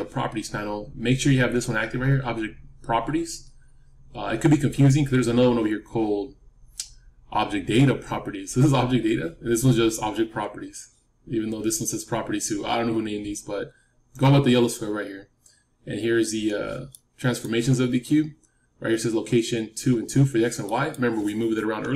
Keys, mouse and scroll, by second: 16.8-18.9 middle drag, 20.6-21.9 middle drag.